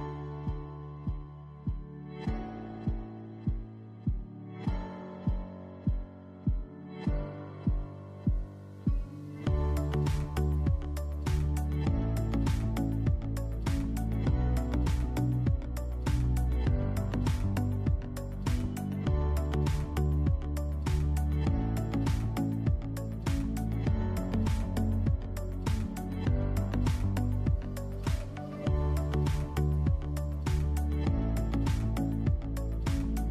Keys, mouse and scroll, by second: 0.4 click, 0.8 s, 1.9 click, 2.9 Tab, 3.4 click, 4.4 g, 5.6 click, 6.5 g, 7.5 click, 7.6 scroll up 2, 7.9-9.8 shift+middle drag, 8.4 e, 9.8 click, 10.1 e, 10.9 click, 11.2 s, 11.8 click, 12.1 e, 13.1 click, 13.5 s, 14.3 click, 14.4 scroll up 1, 15.3-16.8 middle drag, 16.8 click, 17.3 KP_1, 18.1 g, 19.1 click, 19.3 scroll down 1, 19.5 shift+middle click, 19.9 scroll up 2, 20.5 click, 21.2-24.5 shift+middle drag, 22.5 KP_1, 23.8 e, 24.5 click, 24.8 s, 25.3 click, 25.6 e, 26.3 click, 26.7 s, 27.4 click, 27.7 e, 28.4 click, 28.8 s, 29.5 click, 29.7 e, 30.5 click, 30.8 s, 32.1 click, 32.3-33.3 shift+middle drag, 32.7 scroll up 2.